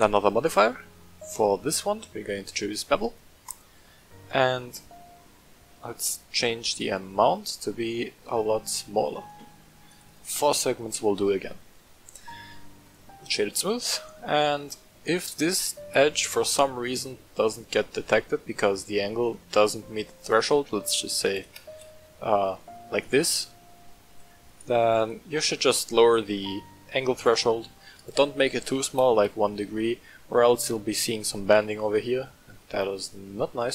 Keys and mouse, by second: 4.9-5.2 middle drag, 6.3-9.3 shift+drag, 9.8 click, 12.3 w, 14.0 middle click, 14.4 middle click, 20.3-22.3 drag, 23.1 middle click, 24.0 click, 24.9-29.7 drag, 32.5-33.7 middle drag.